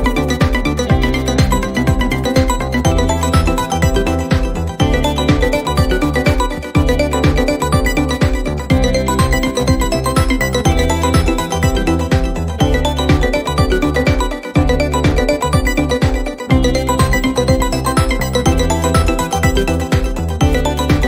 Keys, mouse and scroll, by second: 0.7 click, 1.6 ctrl+d, 2.6 u, 5.4 click, 5.6 click, 9.7-11.4 drag, 12.3-15.3 drag, 17.0 click, 19.0 click, 19.5 4, 20.4 Return.